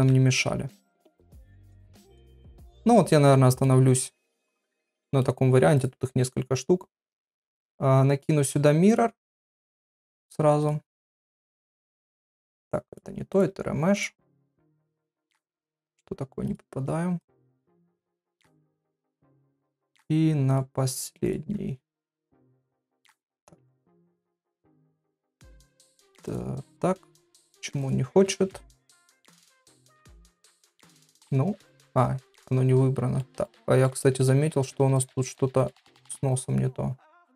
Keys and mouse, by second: 0.0 Tab, 0.3 middle click, 1.1 middle click, 1.6 click, 2.1 middle click, 3.1 middle click, 4.5 middle click, 5.7 click, 8.2 click, 9.6 click, 11.5 click, 13.0 click, 13.4 click, 14.8-16.5 drag, 17.2 click, 17.9 click, 20.5 click, 26.2 click, 28.4 ctrl+s, 28.8 middle click, 31.1 click, 32.3 middle click, 33.4 middle click, 34.0 shift+middle click, 35.3 middle click.